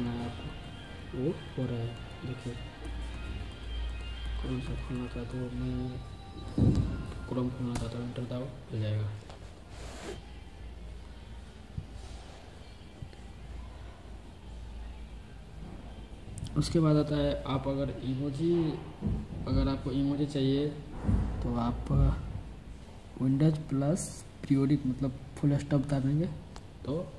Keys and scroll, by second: 0.4 super+t, 0.7 super+t, 1.4 super+t, 1.8 super+t, 9.8 Return, 25.7 super+..